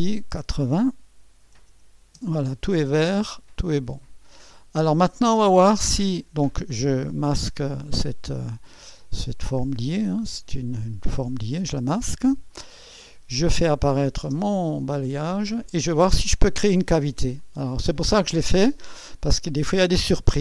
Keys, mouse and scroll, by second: 0.0-1.0 drag, 1.2 8, 1.5 0, 2.1 Return, 2.8-4.2 scroll down 1, 4.2 click, 6.9-7.9 drag, 11.7 space, 12.5 click, 13.8 click, 14.3 space, 14.4 click, 17.4-18.5 drag.